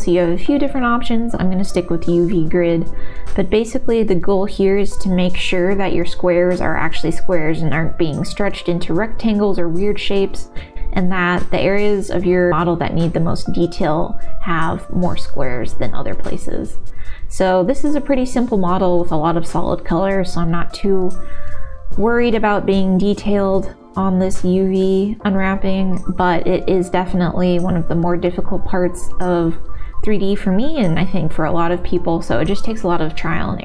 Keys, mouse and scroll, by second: 5.8 l, 5.8 g, 8.5 s, 13.3 l, 13.7 l, 14.5 g, 16.2 s, 18.1 shift+middle click, 19.4 s, 21.7 shift+middle click, 24.5 l, 25.1 r, 28.3 g, 30.8 shift+middle click, 32.5 click.